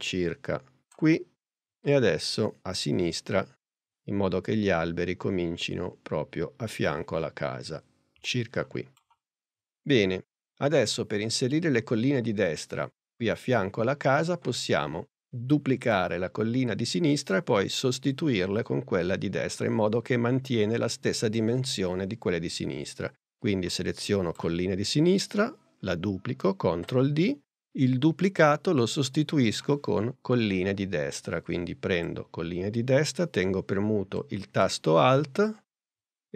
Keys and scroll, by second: 26.7 super+d.